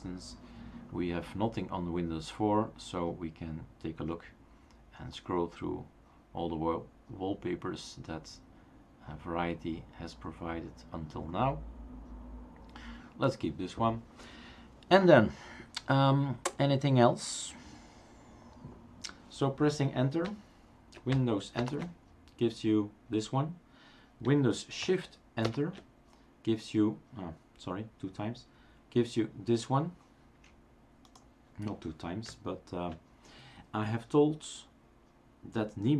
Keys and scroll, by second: 21.6 super+Return, 24.8 super+Caps_Lock, 25.4 shift+super+Left.